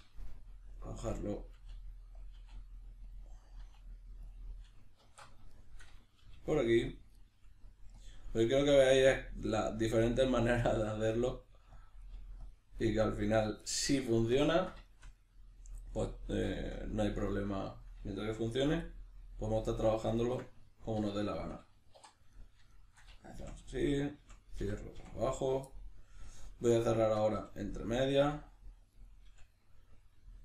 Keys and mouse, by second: 1.5 e, 2.3 click, 2.4 e, 3.1 click, 3.6 e, 4.3 click, 5.0 alt+q, 5.5-7.0 shift+middle drag, 6.3 g, 7.0 click, 7.1 right click, 7.3 g, 8.0 click, 8.4 right click, 8.6 g, 9.2 click, 9.9-12.9 typing, 10.4 click, 10.9 click, 11.8 click, 12.0 right click, 12.5 click, 12.8 right click, 13.4 click, 13.6-20.2 middle drag, 20.2 shift+right click, 21.0 f, 21.3 shift+middle click, 22.0 3, 22.3 right click, 22.7 shift+right click, 23.4 f, 23.8 right click, 24.2 f, 25.7 middle click, 26.4 right click, 27.0 shift+right click, 27.4 f, 27.9 right click, 28.2 f, 28.9 right click, 29.3 f, 29.6-30.4 middle drag.